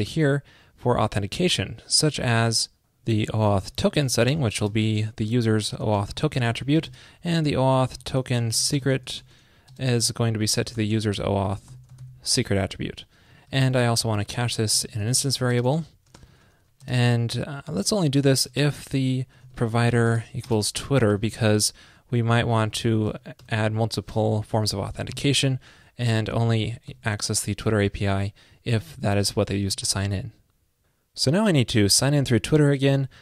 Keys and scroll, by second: 13.7 super+Left, 22.7 super+Left, 27.0 super+Left, 29.8 super+s.